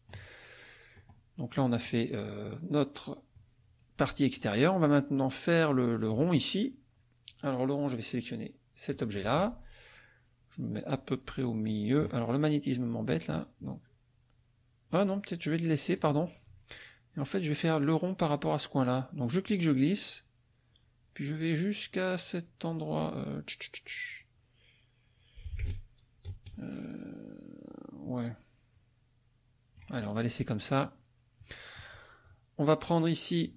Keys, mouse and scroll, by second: 1.0-2.1 drag, 8.9 click, 13.1 click, 15.9 click, 19.2-29.9 drag, 32.8 right click.